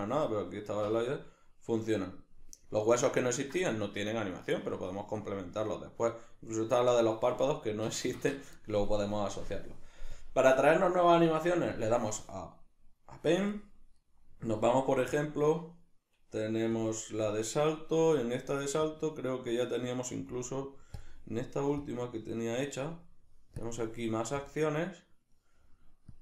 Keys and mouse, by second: 7.9 Escape, 10.2-26.2 drag.